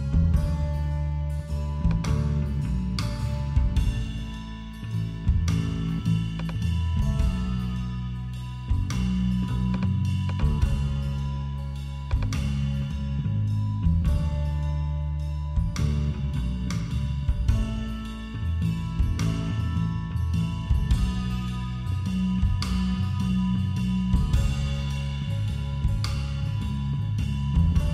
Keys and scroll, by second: 13.7 Home.